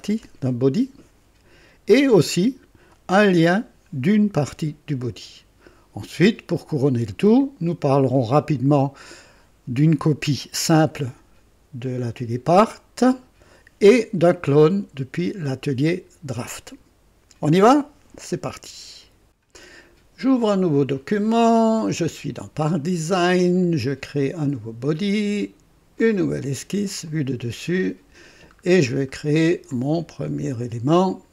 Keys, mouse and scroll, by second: 19.3 click, 20.9 click, 24.1 click, 25.9 click, 27.0 click, 27.7 click, 28.6 scroll up 2, 29.0 right click, 29.1 click, 31.0 click.